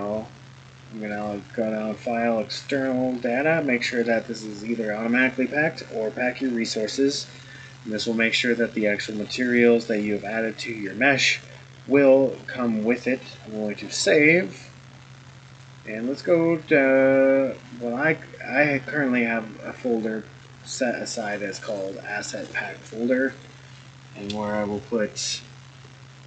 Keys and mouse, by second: 1.2-13.8 drag.